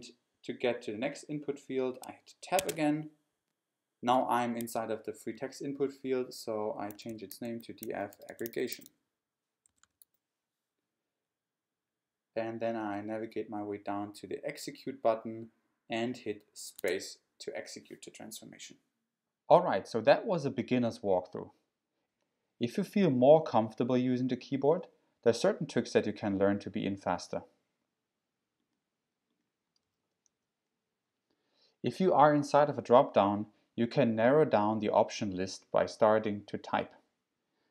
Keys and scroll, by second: 2.6 Tab, 6.7-10.5 typing, 12.8 Tab, 16.8 space, 29.5-30.3 typing, 32.4 typing.